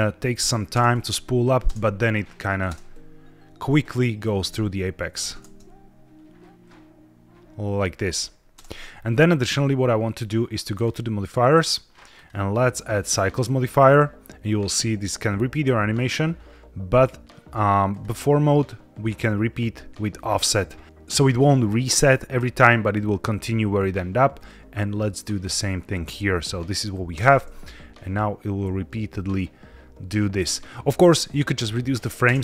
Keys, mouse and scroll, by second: 0.6 space, 1.6 space, 2.3-2.6 drag, 2.6 space, 4.3 space, 4.9 drag, 5.2 space, 8.5 space, 8.6 click, 10.6 click, 12.0-13.4 drag, 17.8-20.2 drag, 20.8-22.6 scroll down 3, 24.3-25.3 drag, 26.0 scroll up 1, 26.1-26.5 scroll down 2, 27.0 space, 32.1 space.